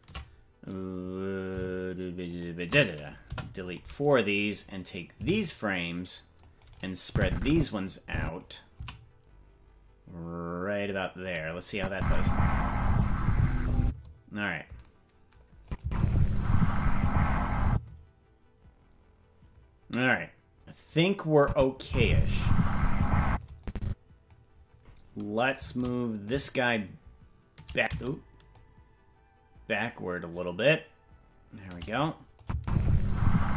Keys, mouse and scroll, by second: 3.2 Delete, 5.1 c, 7.0 click, 8.0 click, 8.7 s, 11.7 click, 11.9 space, 13.8 space, 15.6-18.6 drag, 15.8 space, 17.7 space, 21.4 click, 21.8 space, 23.3 space, 23.6 click, 26.2-27.6 shift+drag, 28.5-31.7 shift+drag, 32.4 click, 32.5 space.